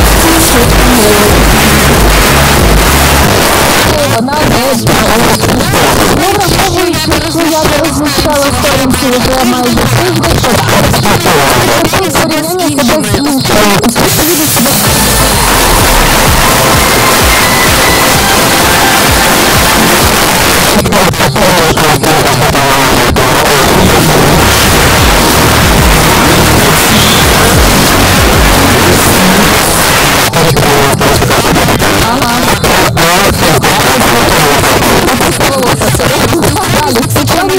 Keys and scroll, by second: 3.2 Page_Down, 20.1 Page_Down, 29.6 Page_Down.